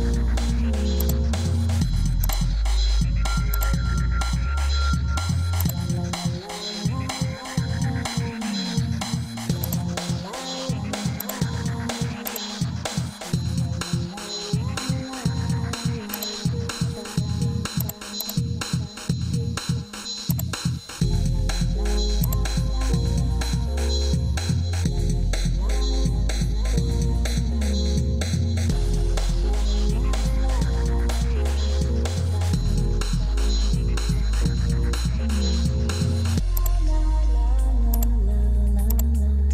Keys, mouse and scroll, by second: 27.1 ctrl+s.